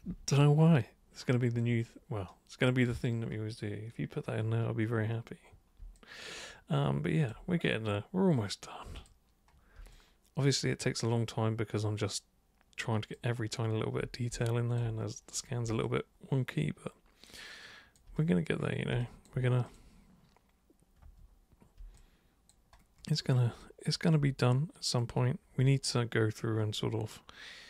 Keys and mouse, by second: 6.0-7.3 alt+super+drag, 9.0 super+click, 10.0-13.1 alt+super+drag, 14.5 alt+super+click, 15.8-18.0 alt+super+drag, 19.0 alt+super+click, 19.7 super+click, 21.0 super+1, 22.0 alt+super+click, 23.6 alt+super+click, 24.4 super+right click, 26.8-27.6 alt+super+drag.